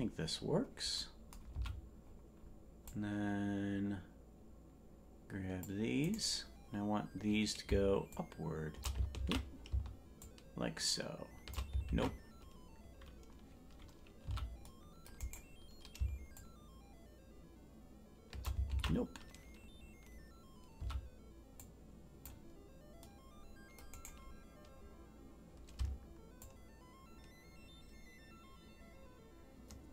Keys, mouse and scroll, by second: 0.4-0.9 scroll down 1, 0.9 scroll down 2, 1.5 c, 8.1 shift+click, 9.2 ctrl+z, 10.2-11.5 shift+drag, 11.9 ctrl+z, 14.2 c, 16.3-18.4 shift+drag, 18.7 ctrl+z, 20.0-20.7 scroll up 1, 20.7 c, 26.4-29.9 shift+drag.